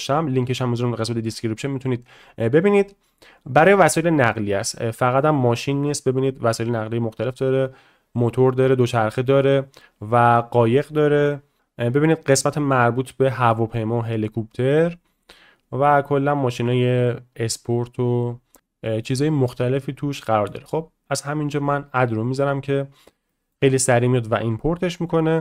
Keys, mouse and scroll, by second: 3.9 click, 4.8-5.8 drag, 6.1-7.1 drag, 8.2-9.7 drag, 10.0-10.8 drag, 11.2-14.7 drag, 15.4-16.8 drag, 17.1-19.0 drag, 21.1 click, 23.3 shift+middle drag, 23.7 middle drag, 24.6 shift+middle click.